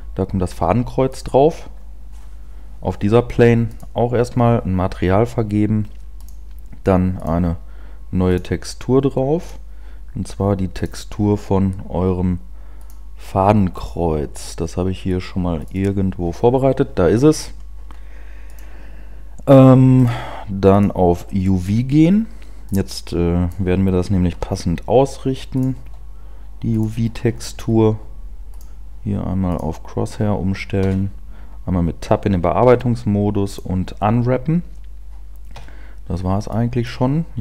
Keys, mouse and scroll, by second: 1.2 click, 3.7 click, 6.1 click, 7.2 click, 8.4 click, 15.8 click, 19.4 click, 20.1 click, 22.7 click, 24.5 t, 25.7 click, 29.7 click, 29.7 scroll down 2, 32.5 Tab, 33.5 u, 35.5 Tab, 36.5 click.